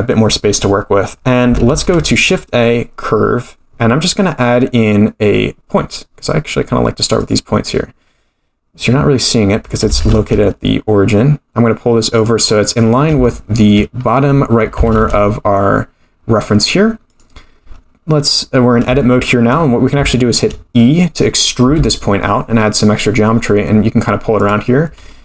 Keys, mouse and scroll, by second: 1.7 shift+a, 8.8-9.8 scroll down 3, 9.8 scroll down 1, 9.8 g, 12.5-13.1 scroll up 9, 13.2 shift+middle click, 14.0-14.7 scroll up 2, 14.7 scroll up 1, 14.7 g, 17.4-17.8 scroll down 1, 19.0 shift+middle click, 20.1 shift+middle click, 20.6-21.5 scroll down 2, 21.5 scroll down 1, 21.6 e, 24.8-25.2 scroll down 3.